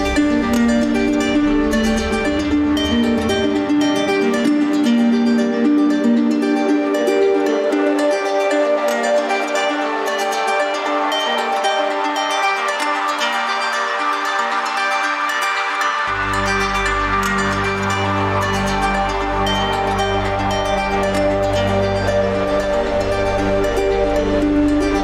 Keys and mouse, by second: 3.1 alt+z, 3.8-4.4 middle drag, 5.2-5.7 middle drag, 6.0 shift+middle drag, 6.7 middle click, 7.3-8.9 middle drag, 9.1 ctrl+z, 9.4 ctrl+z, 11.0 ctrl+z, 11.9-16.7 ctrl+z, 18.6-20.1 middle drag, 21.2-21.6 shift+middle drag, 24.0 shift+middle drag.